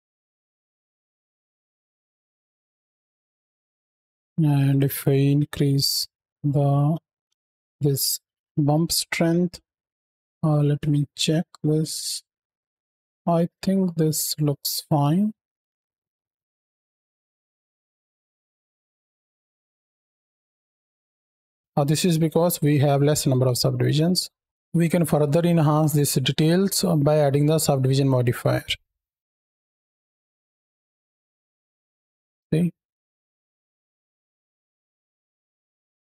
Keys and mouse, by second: 0.1 shift+middle click, 0.9 space, 1.1-1.9 shift+drag, 2.1 click, 2.4 shift+drag, 2.8 click, 3.1 shift+drag, 4.5-7.2 drag, 8.0-8.3 middle drag, 8.9 middle drag, 9.4 middle click, 10.0 middle drag, 10.7 shift+middle drag, 11.2-12.0 middle drag, 12.5 space, 12.7 space, 13.2 space, 13.5-14.2 middle drag, 14.5 drag, 15.0 shift+drag, 15.7 click, 16.1 space, 17.1-18.0 drag, 17.1 space, 18.5 space, 19.4 drag, 21.0 space, 21.5 shift+middle click, 26.9 click, 28.8-29.2 middle drag, 29.6 click, 29.8 middle drag, 30.1 middle drag, 30.4 shift+middle click, 30.6 middle drag, 30.9 z, 31.1 middle drag, 31.6 shift+middle click, 32.0 middle click, 32.4-32.9 drag, 32.9 shift+Left, 32.9 space, 33.1 click, 33.3 shift+click, 33.6 click, 34.1 space, 34.3 space, 34.5 click, 34.7 shift+click, 35.3 click, 35.3 space, 35.5 shift+click.